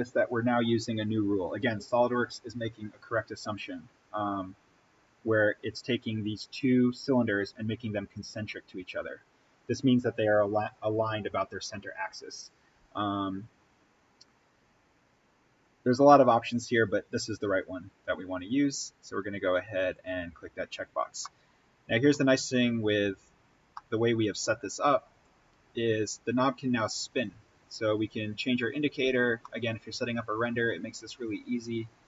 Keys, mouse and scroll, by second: 19.9 click, 20.9 scroll up 1, 21.2 middle click, 22.3-23.0 scroll up 1, 23.7-25.1 middle drag, 25.1-29.0 drag, 29.0-29.4 scroll up 1, 29.4 middle click, 30.5-31.2 scroll down 1, 31.2-32.0 drag.